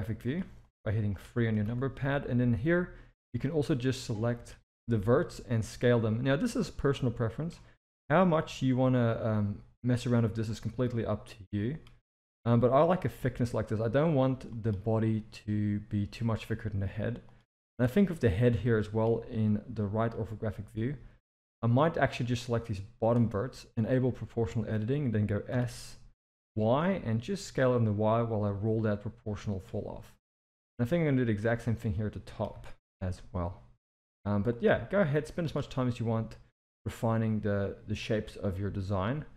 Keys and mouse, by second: 0.7 click, 1.6 s, 4.2 click, 4.8 s, 6.9 click, 7.7 s, 10.5 click, 11.8 s, 14.5 shift+middle click, 16.6 Tab, 17.3 drag, 17.8 click, 18.2 Tab, 18.8 shift+middle drag, 20.2-22.0 drag, 22.4 click, 24.2 click, 25.5 s, 30.3 shift+middle click, 30.9 click, 32.5 s, 35.1 z, 36.8-37.9 middle drag, 38.5 KP_7.